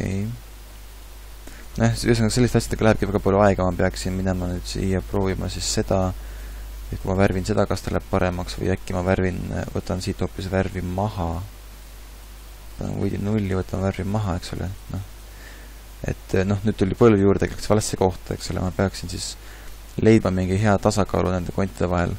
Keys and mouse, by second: 8.0 ctrl+z.